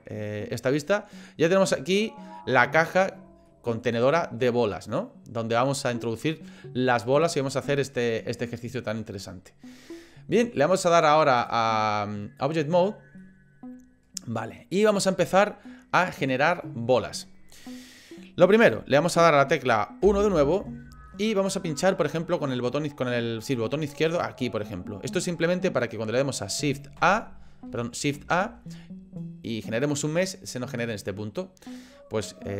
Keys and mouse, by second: 0.5-2.1 middle drag, 2.4 middle click, 3.5 middle click, 4.4-6.1 middle drag, 11.4-12.6 drag, 13.2-14.9 middle drag, 15.7 middle click, 20.0 KP_1, 21.1 shift+middle click, 24.1 click, 27.0 a, 28.1 a.